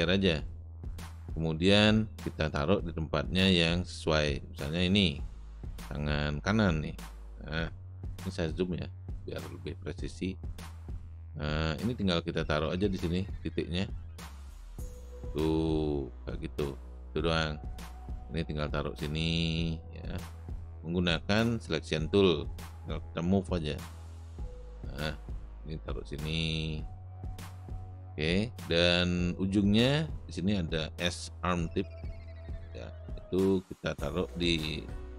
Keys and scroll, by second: 9.9 space.